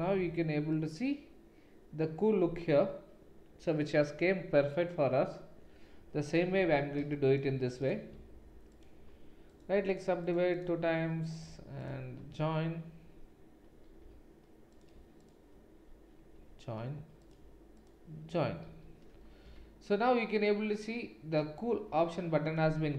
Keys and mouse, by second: 0.3 Tab, 6.4 Tab, 7.8 click, 8.7 click, 11.2 click, 11.8 shift+click, 14.0 j, 15.2 shift+click, 16.3 j, 17.7 shift+click, 18.7 j, 19.6 Tab.